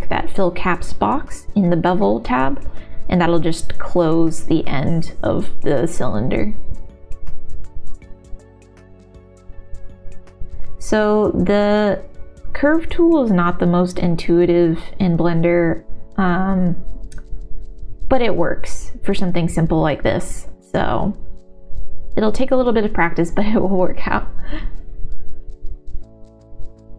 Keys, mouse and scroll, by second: 0.6 middle click, 0.8 click, 2.4 click, 3.2 g, 4.8 g, 6.5 shift+middle click, 7.6 g, 8.0 z, 9.6 middle click, 9.9 click, 10.5 g, 10.8 click, 11.1 g, 11.7-13.1 middle drag, 13.5 right click, 14.6 ctrl+z, 14.8 Tab, 15.0 Tab, 15.2 shift+z, 15.5 shift+z, 16.3 alt+z, 16.5 middle click, 17.1 shift+middle click, 18.1 ctrl+z, 19.2 click, 19.9 middle click, 20.5 g, 21.2 middle click, 21.5 g, 22.0 middle click, 22.5 middle click, 23.4 click, 23.8 g, 23.8 middle click, 24.4 g, 25.1 g, 26.6 alt+s.